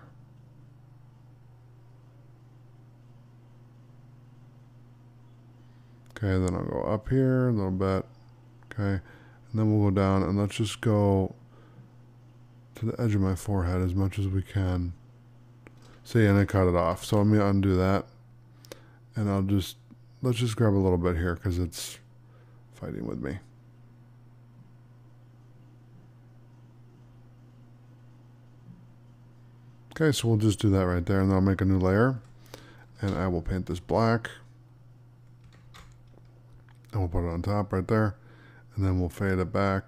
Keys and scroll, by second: 16.8 ctrl+z, 35.5 ctrl+d.